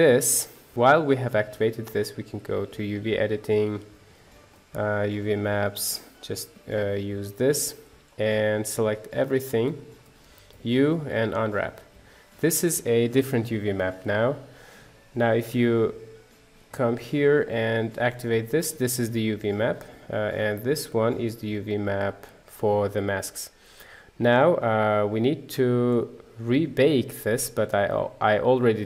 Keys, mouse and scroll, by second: 0.7 middle click, 0.9 click, 6.1 click, 8.1-9.2 middle drag, 9.8-11.3 middle drag, 16.6 click, 17.5 click, 20.7 click, 24.9 click.